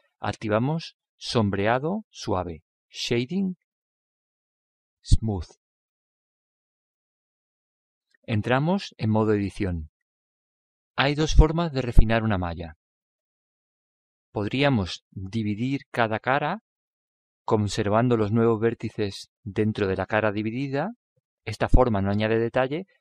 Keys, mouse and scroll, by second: 0.0 t, 4.5-9.8 drag, 9.8 Tab, 10.6-14.6 middle drag.